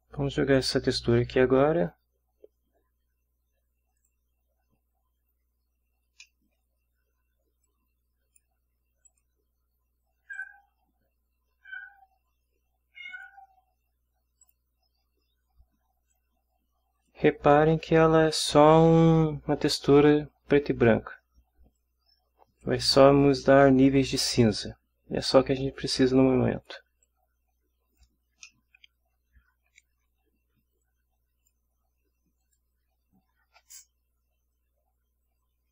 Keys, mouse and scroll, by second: 0.6 click, 4.0 click, 6.2-6.7 middle drag, 7.5 scroll down 2, 7.6 click, 8.0 scroll up 2, 9.0 click, 10.3 click, 13.1 click, 14.4 click, 16.1 click, 21.8-22.8 drag, 25.8-26.8 drag, 27.0-28.2 drag, 28.4-29.8 middle drag, 30.8-31.7 drag, 32.4 click.